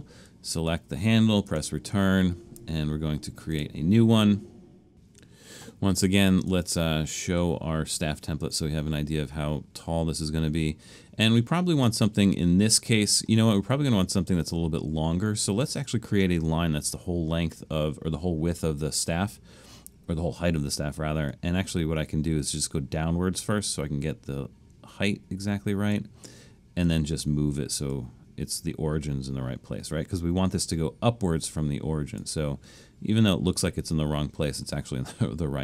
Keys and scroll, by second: 1.5 Return.